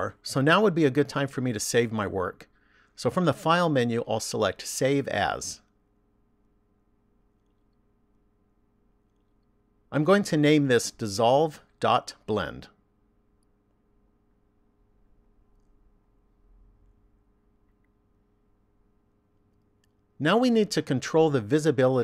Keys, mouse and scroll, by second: 2.0 click, 4.8 click, 20.0 click.